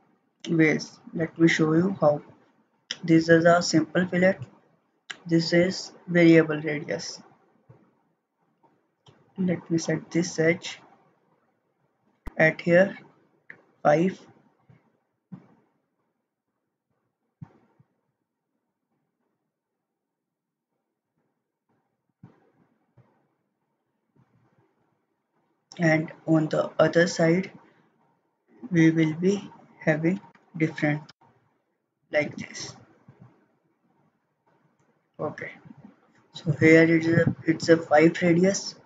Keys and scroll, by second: 1.2 ctrl+z, 29.9-30.8 typing, 31.1 Return.